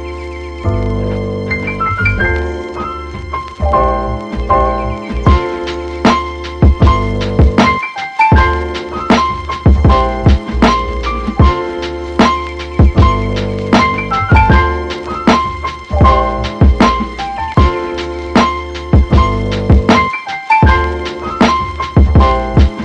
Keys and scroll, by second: 21.3 super+s, 21.8 Right, 22.5 BackSpace, 22.6 3, 22.7 Return.